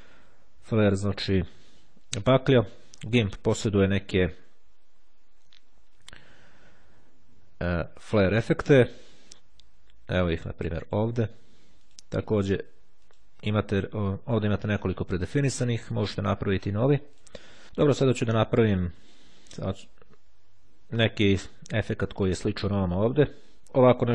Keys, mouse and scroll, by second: 3.1 click, 8.4 click, 10.9 click, 11.7-13.1 drag, 13.7 click, 14.8 click, 17.0 click, 19.0 click.